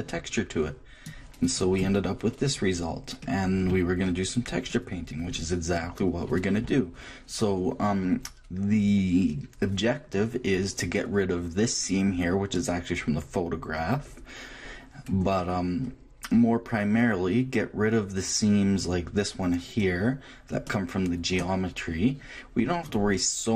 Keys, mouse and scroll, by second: 1.1-2.6 drag, 2.3-6.9 middle drag, 10.9-17.3 middle drag, 22.6-23.5 middle drag.